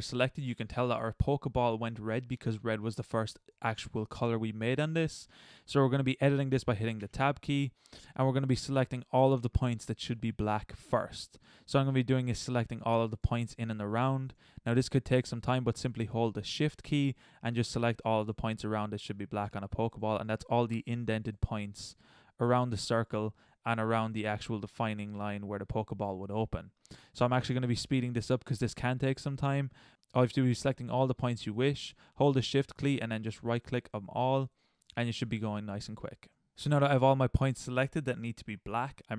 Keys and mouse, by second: 2.4-3.1 middle drag, 3.4-5.3 middle drag, 7.0 Tab, 9.1 middle click, 9.3 middle click, 11.4 middle drag, 12.2-14.1 middle drag, 16.8-17.1 right drag, 19.3 middle click, 20.4 middle click, 20.6 middle click, 20.8 middle click, 21.0 drag, 21.8 middle click, 22.5 click, 23.4 drag, 23.7-25.6 middle drag, 26.0 middle click, 26.6 middle click, 27.7 drag, 27.9-29.0 middle drag, 29.2 middle click, 30.2 middle click, 30.7 c, 31.4 click, 31.5 middle click, 31.6 click, 31.6 middle click, 32.2 c, 33.5 middle click, 33.6 middle click, 34.0 c, 34.3 middle click, 35.0 middle click, 35.1 c, 36.3 c, 36.5 middle click.